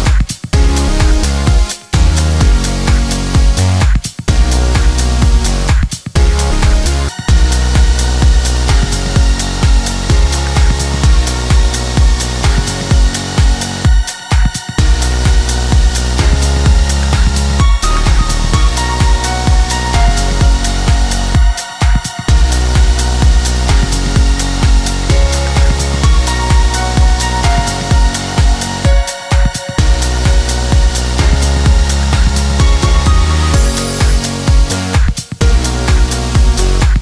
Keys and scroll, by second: 1.6 Caps_Lock, 6.3 space, 11.0 ].